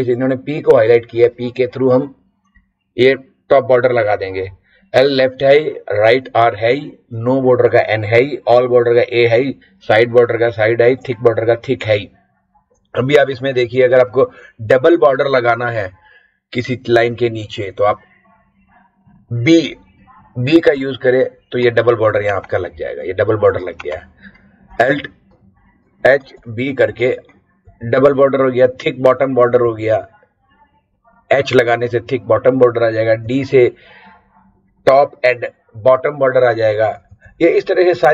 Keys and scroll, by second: 20.7 b, 26.0 alt+h, 26.3 b, 27.6 Down, 29.5 Up, 33.2 Down, 37.0 Down.